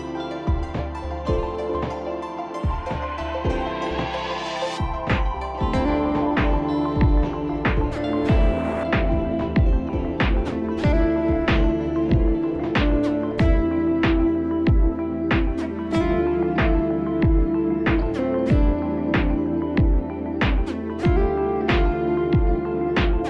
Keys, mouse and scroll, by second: 0.0 click, 0.2 click, 2.6 click, 4.1 click, 8.1 click, 10.5 alt+click, 12.2 click, 13.7 click, 14.7 click, 16.7 click, 17.7 click, 18.2 click, 18.5 click, 18.7 click, 18.8 click, 19.0 click, 19.1 click, 19.2 click, 19.6 click, 19.7 click, 20.2 click, 20.2 click, 20.7 click, 21.2 click.